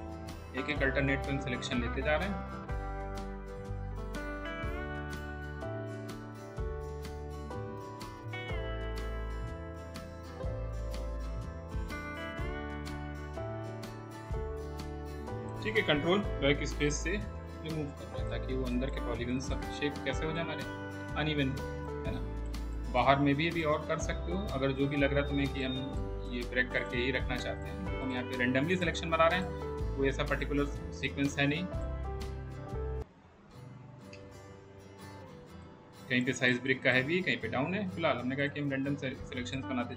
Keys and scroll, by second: 17.0 ctrl+BackSpace, 34.3 ctrl+BackSpace.